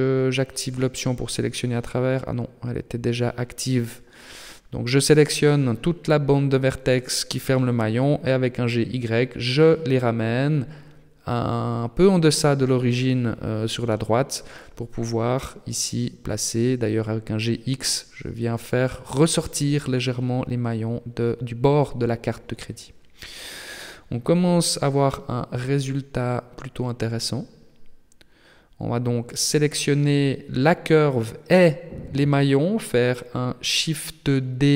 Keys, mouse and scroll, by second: 0.3 b, 1.3 middle click, 2.9 click, 4.6 b, 5.7 KP_3, 6.8 shift+middle click, 7.5 scroll up 2, 7.7-8.5 scroll down 1, 8.5 g, 11.8 middle click, 13.2 a, 13.4 a, 14.4 g, 16.6 Tab, 16.9 scroll down 2, 17.4 middle click, 17.9-18.5 scroll down 5, 18.5 shift+middle click, 19.2-20.1 scroll down 2, 20.1 middle click, 21.1-21.7 scroll up 7, 23.4 middle click, 25.5-26.0 scroll up 3, 26.0 shift+middle click, 26.5-26.9 scroll down 4, 26.9 shift+middle click, 28.9 right click, 29.8 shift+right click, 31.5 KP_3, 32.1 scroll down 5, 32.7 shift+middle click, 33.8 shift+d.